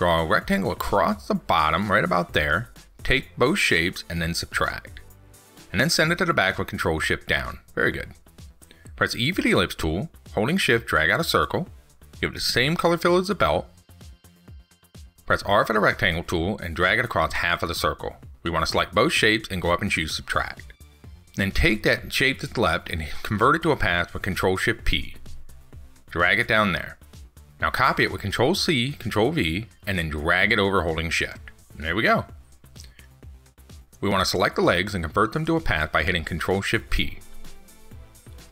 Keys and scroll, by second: 6.5 ctrl+shift+Down, 23.8 ctrl+shift+p, 27.9 ctrl+c, 28.2 ctrl+v, 36.8 ctrl+shift+p.